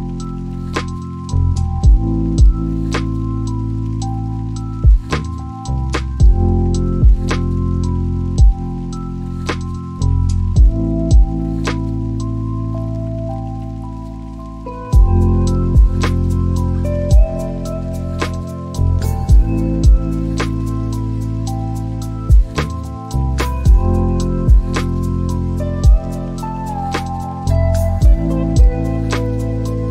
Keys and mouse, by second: 2.0 click, 3.3-5.4 drag, 4.5 KP_0, 8.1-11.9 drag, 11.3 KP_0, 17.7 click, 25.3 click, 26.3-27.9 drag.